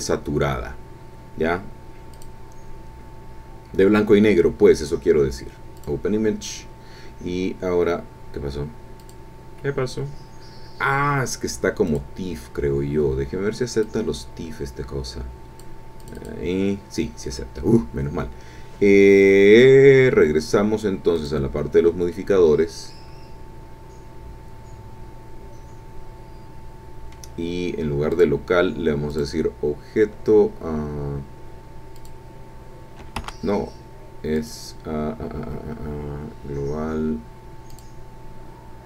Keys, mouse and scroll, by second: 2.2 click, 5.8 click, 9.0 click, 11.9 click, 13.8-15.8 drag, 16.0 click, 21.2 click, 22.1-27.3 middle drag, 28.1 click, 29.1 click, 31.9 click, 33.2 Escape, 34.3 click, 37.7 click.